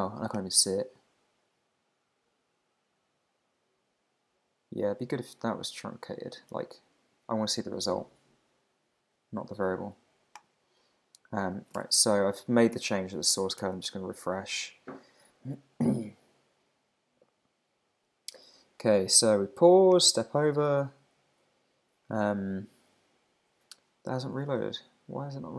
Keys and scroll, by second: 11.8 super+Tab, 12.7 super+s, 12.9 super+Tab, 13.6 super+r, 24.4 super+Tab.